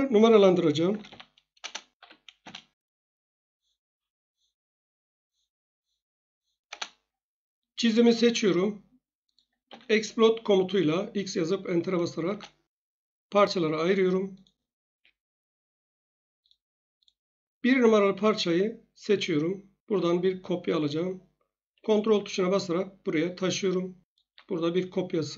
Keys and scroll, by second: 0.6-2.5 typing, 1.6 Return, 6.7 Return, 9.6 x, 12.2 Return, 14.8 Escape.